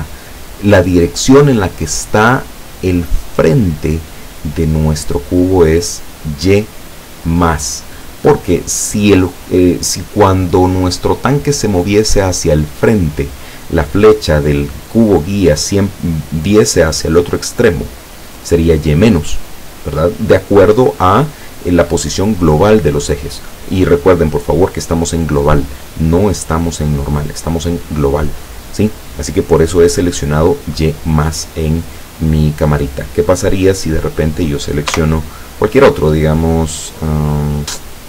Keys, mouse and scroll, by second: 31.4 right click, 34.9 KP_0, 36.4 click.